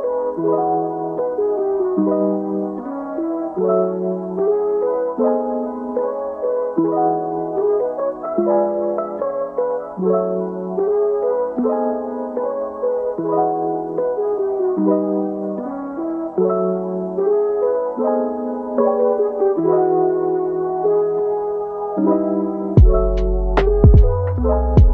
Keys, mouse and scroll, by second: 0.9-4.3 typing, 5.7 middle click, 9.5 typing, 12.5 typing, 13.7 typing, 15.8 typing, 21.1 typing, 23.5-23.9 typing.